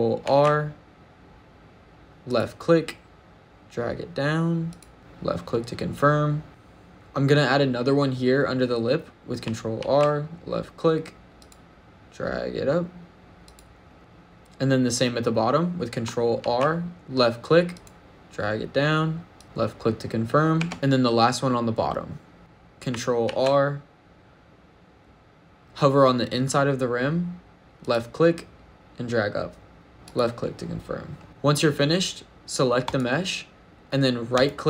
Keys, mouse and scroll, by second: 0.1 ctrl+r, 4.5 click, 6.5 shift+middle click, 6.5 scroll down 1, 9.6 ctrl+r, 13.3 click, 14.0 shift+middle click, 14.0-15.9 scroll up 3, 16.2 ctrl+r, 19.2 click, 20.4 Tab, 20.7 ctrl+r, 20.7 ctrl+z, 20.7 click, 20.7 middle click, 20.7-21.9 scroll up 1, 21.9 middle click, 23.1 ctrl+r, 29.9 click, 31.0 middle click, 31.2 ctrl+z, 31.2 click, 31.2 right click, 32.7 click, 34.2 right click.